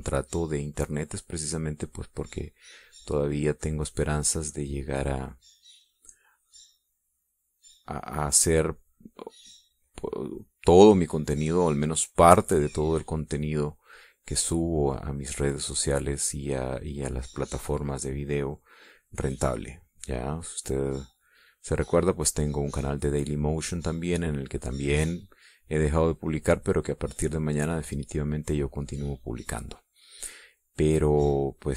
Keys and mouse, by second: 1.0 click, 2.9 click, 3.7 click, 4.3-6.4 drag, 7.0 click, 7.7-9.0 drag, 11.2-12.8 drag, 15.0-22.0 drag, 23.9-31.7 drag.